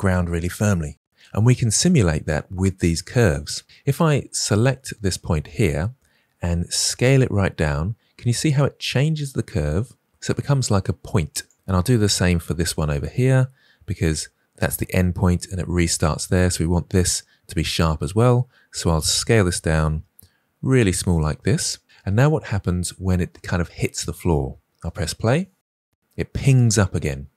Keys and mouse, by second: 4.2-5.0 drag, 6.7 s, 11.8 click, 12.3 click, 19.2 s, 24.8 space.